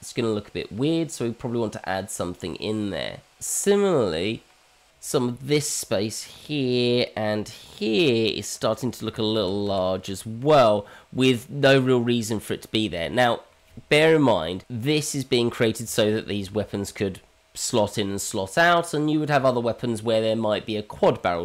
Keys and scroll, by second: 9.4 ctrl+z, 10.0 ctrl+z.